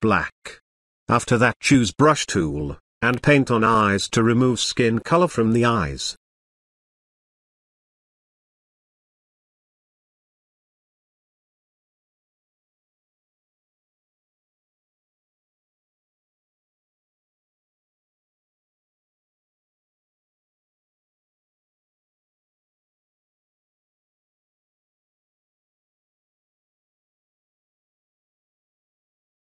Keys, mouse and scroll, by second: 1.5-2.2 typing, 2.5-8.4 drag, 8.9 [, 9.0 [, 9.1 [, 9.3 [, 9.8-13.8 drag, 14.5 ctrl+z, 16.5-18.7 drag, 18.8 space, 19.0-19.9 ctrl+drag, 28.3-29.4 drag.